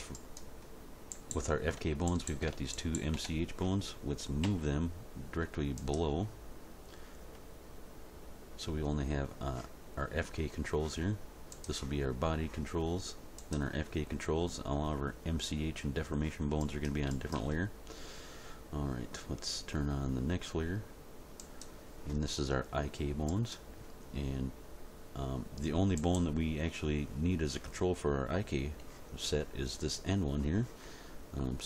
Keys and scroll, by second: 4.4 m.